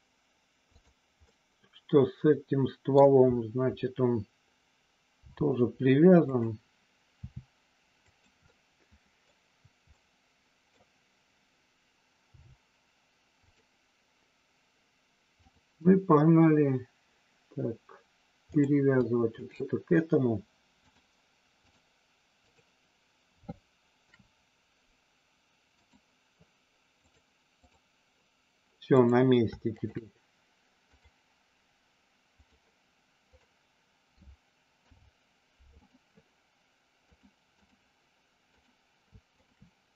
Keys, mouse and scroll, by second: 1.2-2.9 middle drag, 5.2 g, 6.2 click, 7.2 r, 8.1 click, 8.5 middle click, 9.9 middle click, 12.2 g, 13.3 click, 15.5-16.9 drag, 19.2 shift+click, 20.8-21.8 drag, 24.1 ctrl+p, 27.1 click, 28.9 click, 29.6 shift+click, 31.1-32.5 drag, 33.2 click, 34.8 ctrl+p, 37.1 click, 38.5 click, 39.3 shift+click.